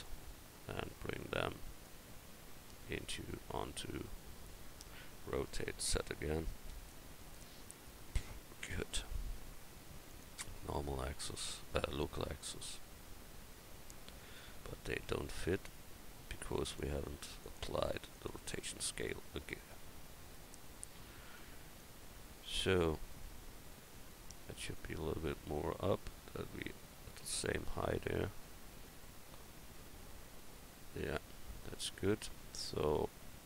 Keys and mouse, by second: 4.2 drag, 5.6 r, 10.1-11.8 drag, 14.5 Tab, 15.1 Tab, 21.3 click, 22.2 click.